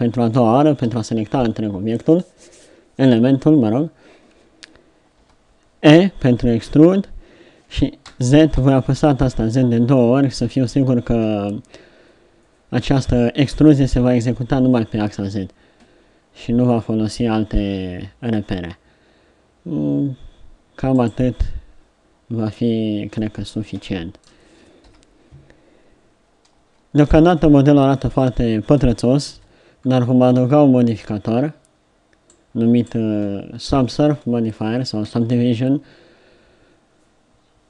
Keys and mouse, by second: 0.9 KP_3, 5.2 e, 23.3 middle click, 24.9 KP_7, 26.7 Tab, 27.4-29.4 middle drag, 29.4 KP_7, 32.3 middle click.